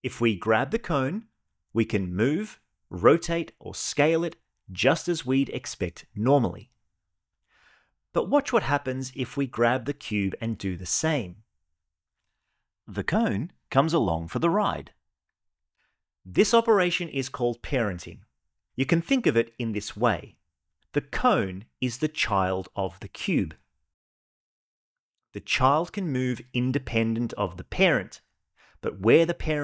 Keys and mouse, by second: 0.0 g, 2.2 r, 3.6 right click, 4.1 g, 8.4 click, 11.0 g, 25.7 g, 27.9 click, 28.4 g.